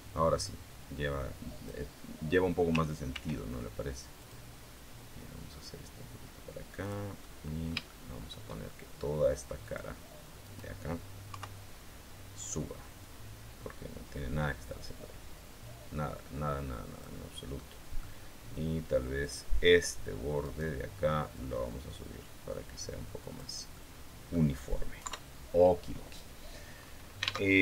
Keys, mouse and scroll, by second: 0.2-1.6 drag, 2.9 ctrl+r, 4.0 click, 4.3 middle click, 6.6 click, 7.0-8.3 middle drag, 9.4 click, 9.8 middle click, 10.2 right click, 11.1 KP_3, 12.8-17.0 drag, 17.4 middle click, 19.0 click, 20.2 right click, 21.2-23.4 drag, 23.6 middle click, 24.8 KP_3, 25.6-26.6 scroll down 2, 26.6 scroll up 2, 27.2 alt+Tab.